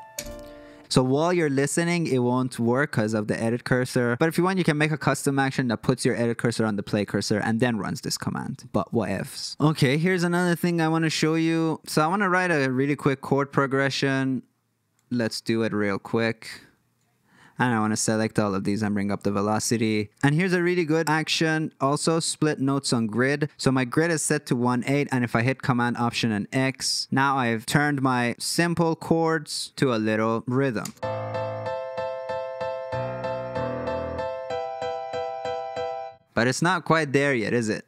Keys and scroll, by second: 0.1 space, 18.3 y, 18.5 y, 18.6 y, 18.8 y, 25.5 alt+super+x, 30.8 space, 36.1 space.